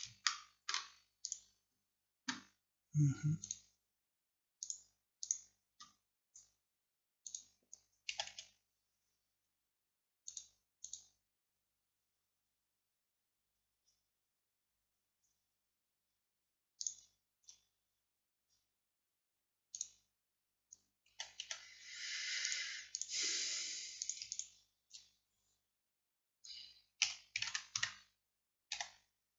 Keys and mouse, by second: 1.3-4.7 middle drag, 7.0-8.2 middle drag, 8.2 a, 8.4 a, 15.9-16.9 middle drag, 21.2 a, 21.5 a, 27.1 r, 28.8 g.